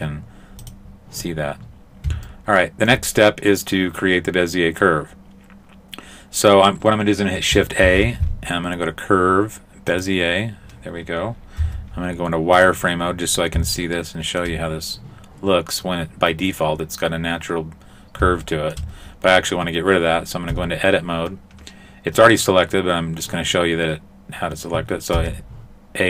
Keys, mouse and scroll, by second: 0.7 click, 2.3 shift+middle click, 7.9 shift+a, 11.6 z, 13.1-13.9 scroll up 6, 13.9 shift+middle click, 18.5 shift+middle click, 20.6 Tab, 25.2 a.